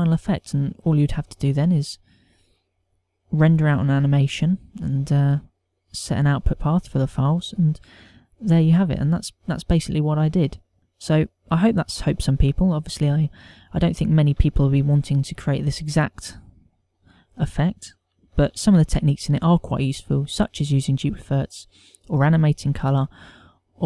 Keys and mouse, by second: 3.2 click, 3.6 click, 5.7 click, 8.6 click, 17.9 click, 19.5 alt+a.